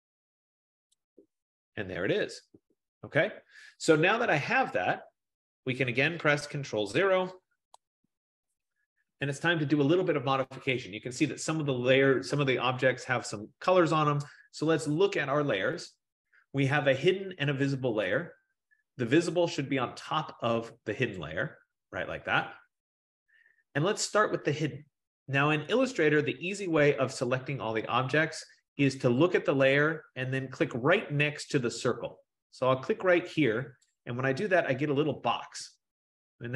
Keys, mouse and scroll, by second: 1.0-3.6 drag, 5.1 click, 8.4 ctrl+0, 15.2 click, 18.3 click, 21.2 click, 24.3 click, 34.0-36.5 drag.